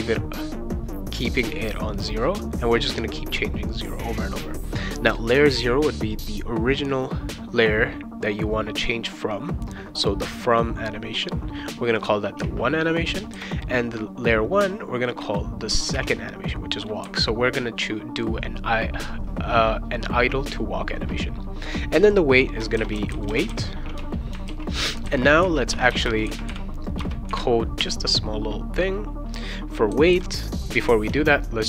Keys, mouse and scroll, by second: 12.4 1, 15.9 2, 22.5-24.0 typing, 24.4 ctrl+s, 25.7 Return, 25.9 Return, 26.9 Return.